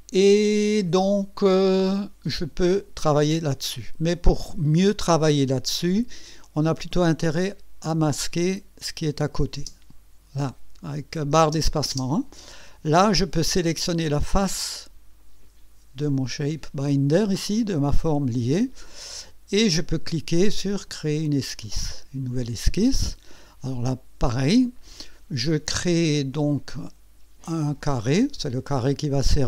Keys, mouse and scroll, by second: 8.5 click, 9.6 space, 11.4 space, 14.2 click, 21.6 click, 23.0 scroll up 1, 23.7 right click, 27.8 click.